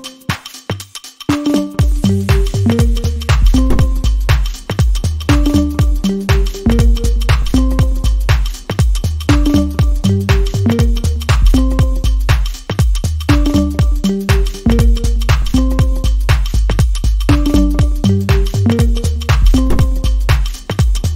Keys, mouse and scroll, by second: 12.4 double click, 14.0-17.0 typing, 17.5 Return.